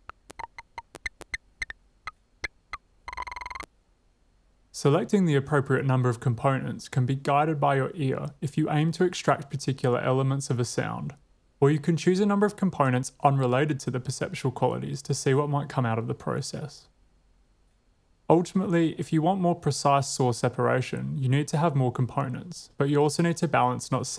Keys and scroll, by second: 3.9 space.